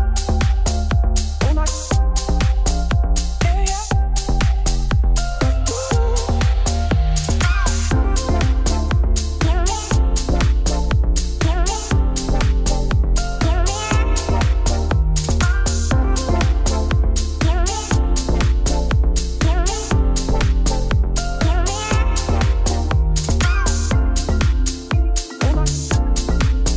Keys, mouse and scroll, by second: 1.1-1.7 scroll down 5, 1.7 shift+middle click, 2.2 click, 2.3 shift+middle click, 2.4 scroll up 2, 2.6 scroll down 1, 2.8 shift+middle click, 3.2 scroll down 2, 3.5 shift+middle click, 3.8 click, 4.1 click, 4.5 KP_3, 4.9 shift+middle click, 5.9 alt+d, 6.4 r, 8.0 scroll up 5, 8.4 g, 9.7 shift+middle click, 10.2 alt+d, 12.3 scroll down 6, 12.5 click, 13.1-14.3 middle drag, 14.3-15.0 scroll down 1, 15.0-18.5 shift+middle drag, 18.5-19.6 shift+right drag, 19.6 shift+a, 20.2 Tab, 20.4 1, 23.9 Tab, 24.2 x, 25.4 shift+a, 25.7 KP_1, 26.7 scroll up 3.